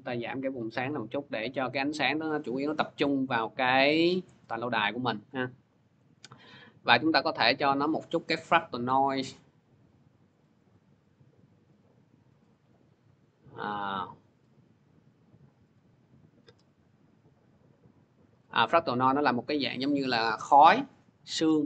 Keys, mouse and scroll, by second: 0.6 middle click, 0.7 middle click, 1.1 middle click, 1.8 middle click, 7.3 click, 10.4 click, 11.6 middle click, 15.5 click, 15.6-16.2 scroll.